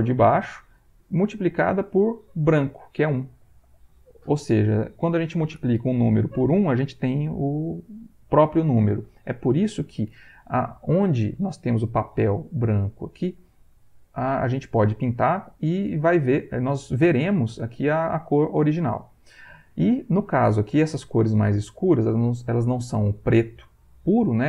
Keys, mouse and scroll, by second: 0.2 click, 1.9 click, 11.6 middle click, 12.9 ctrl+middle click, 13.8 ctrl+middle click, 15.4 click, 15.9-19.3 drag, 19.4 middle click, 20.1 ctrl+middle click.